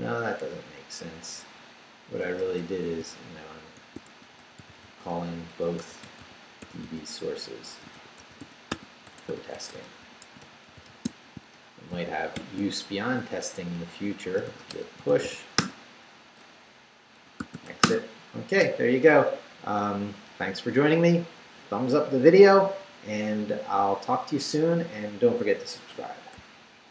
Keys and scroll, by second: 2.2-12.3 typing, 13.4 shift+Return, 14.1-15.7 typing, 16.9-18.1 typing.